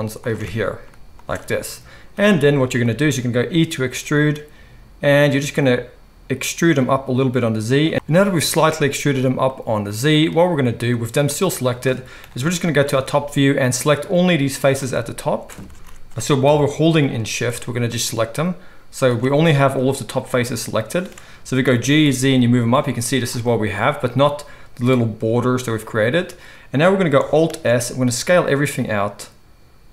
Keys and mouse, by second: 3.9 e, 7.9 alt+a, 7.9 ctrl+z, 12.2 KP_7, 13.9-29.9 drag, 15.7 ctrl+z, 16.5 KP_7, 21.6 g, 27.5 alt+s.